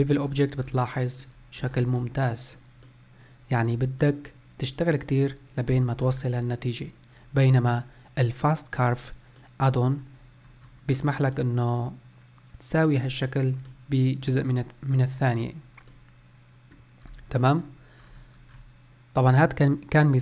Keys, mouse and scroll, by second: 0.2-0.6 scroll up 2, 0.6 scroll down 4, 1.0-1.5 middle drag, 1.5-2.0 scroll up 1, 2.0-5.6 middle drag, 5.6 scroll up 2, 5.9-6.3 scroll down 1, 6.3-10.3 middle drag, 10.3-10.7 scroll up 1, 10.7-11.2 scroll down 1, 11.2-16.9 middle drag, 16.9-17.2 scroll down 1, 17.2-17.8 middle drag, 17.8-18.2 scroll up 1, 18.2-20.0 scroll down 1, 20.0-20.2 scroll down 1.